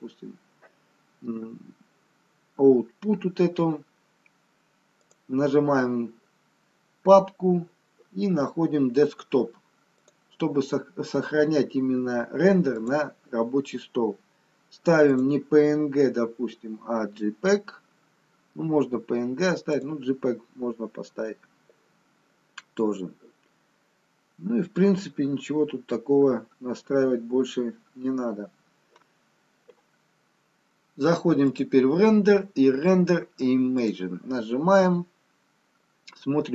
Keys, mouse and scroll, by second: 2.9-4.1 scroll down 2, 5.0 click, 5.0-5.7 scroll down 3, 15.2 click, 24.4-25.5 scroll down 5, 25.5-28.6 scroll down 1, 32.4 click.